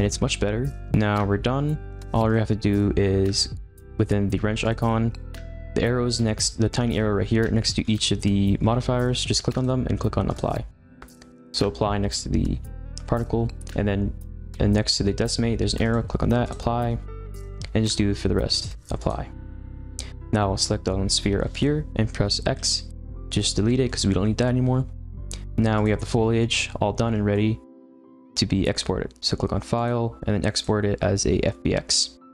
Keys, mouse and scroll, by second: 0.9-1.4 scroll up 5, 1.4 scroll down 2, 2.2 click, 4.6 click, 7.8 scroll up 1, 7.8-8.2 scroll down 3, 8.2 scroll up 1, 8.4 scroll down 2, 8.6-9.5 scroll up 7, 9.5-21.6 drag, 22.5 x, 23.3-25.7 middle drag, 25.7 click, 26.3-28.9 middle drag, 28.9-29.7 scroll up 1, 29.7-32.3 drag.